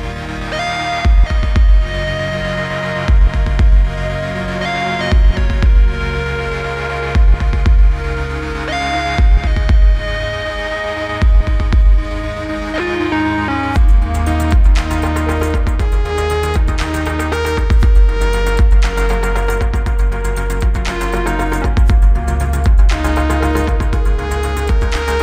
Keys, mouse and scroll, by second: 0.0-1.2 typing, 2.0-3.1 click, 4.7 click, 5.5 Return, 6.6-7.6 click, 9.0 Return, 10.3 click, 11.7 Return, 12.9 click, 14.5 Return, 16.0 click, 17.1 Return, 19.6-21.9 click, 22.7 click, 24.9-25.2 click.